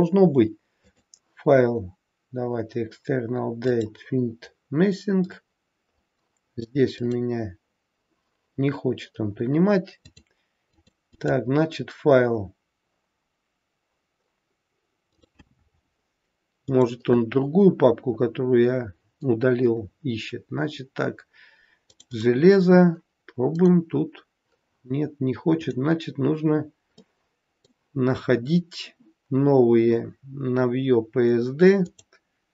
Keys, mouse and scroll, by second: 0.8 click, 9.9 click, 11.1 click.